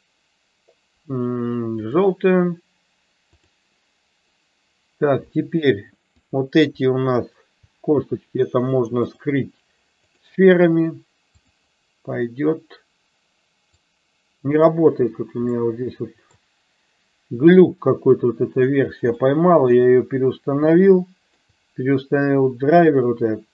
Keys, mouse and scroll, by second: 6.1 click, 7.1 shift+click, 9.1-10.2 drag, 11.3 click, 13.8 click, 15.6-16.3 shift+middle drag, 19.1-19.7 shift+middle drag, 21.0 shift+middle click.